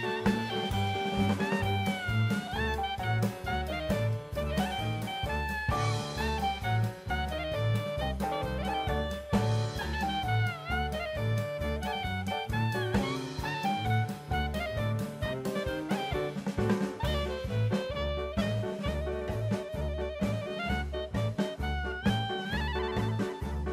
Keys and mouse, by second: 0.5 click, 2.5-4.2 right drag, 5.6-8.2 drag, 8.7-10.4 right drag, 10.9-11.3 shift+middle drag, 11.8-13.8 drag, 15.3 click, 17.2 click, 17.8 click, 19.3-20.3 middle drag, 21.2-23.5 right drag.